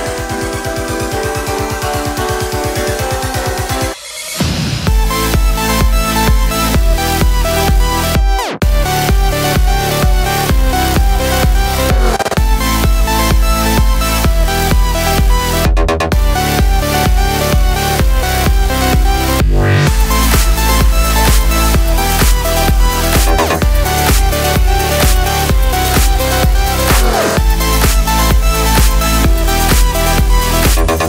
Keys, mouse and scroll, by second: 0.1 scroll up 2, 1.4 r, 5.9 click, 6.8 r, 7.3 KP_Enter, 7.6-14.1 middle drag, 11.5 ctrl+s, 14.1 drag, 14.3-14.6 shift+middle drag, 14.5 scroll up 2, 14.6 drag, 14.8 x, 15.0-15.8 middle drag, 15.8 click, 15.9 x, 16.3 middle click, 16.7 click, 16.9 Tab, 17.1 middle click, 19.9 k, 23.3 middle click, 27.0 KP_1, 29.7 KP_5.